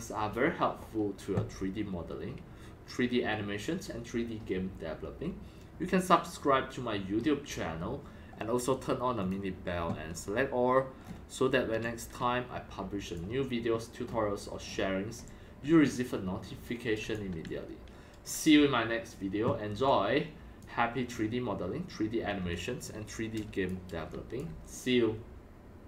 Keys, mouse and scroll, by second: 9.2-11.0 drag, 11.0-11.7 scroll down 4, 11.7-13.0 typing, 11.8-13.1 drag, 13.2-14.0 drag, 14.0-14.5 scroll up 5, 14.6 scroll down 4, 14.7 scroll, 15.1-18.2 typing, 15.2 click, 17.1-18.2 drag, 18.3-19.7 drag, 19.7-20.6 x, 19.8-20.6 drag, 20.7 x, 22.4-24.1 typing, 22.5-22.8 drag, 23.2 click, 23.3 drag, 23.7 drag, 24.0 click, 24.4 click, 25.3 click, 25.8 click.